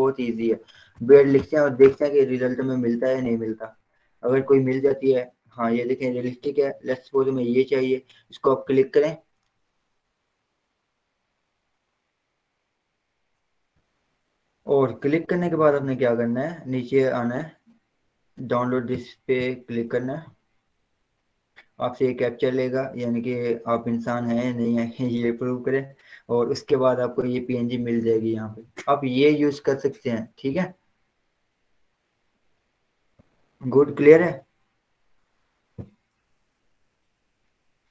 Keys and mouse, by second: 0.7-2.1 typing, 9.4-19.7 drag, 19.7 click, 23.0-26.1 drag, 31.0 click.